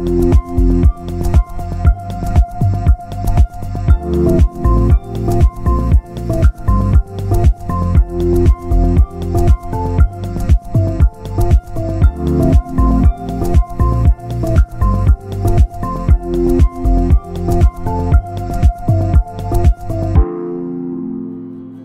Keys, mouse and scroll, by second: 1.6 click, 2.9 alt+a, 3.1 scroll down 2, 3.2 Tab, 3.5 alt+a, 3.9 KP_1, 4.9 shift+middle click, 5.4 scroll down 1, 5.6-6.6 middle drag, 6.6 KP_0, 8.3-8.9 scroll down 1, 8.9 shift+middle click, 9.5-10.0 scroll up 2, 10.0 click, 10.8 Tab, 11.9 l, 12.6 shift+d, 14.9 r.